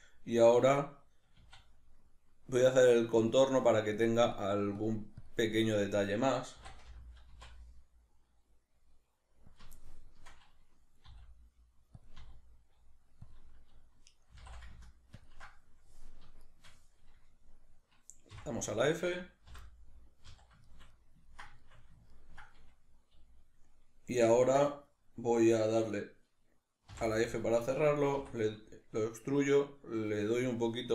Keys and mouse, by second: 1.4 e, 3.3 click, 3.9-6.5 ctrl+drag, 6.5 e, 9.5 click, 9.7-12.0 shift+middle drag, 11.0 e, 12.0 click, 12.2 e, 13.3 click, 14.3 e, 15.3 ctrl+click, 16.4 shift+right click, 18.3 f, 18.8 right click, 19.5 l, 19.6-30.9 middle drag, 20.3 z, 26.9 f.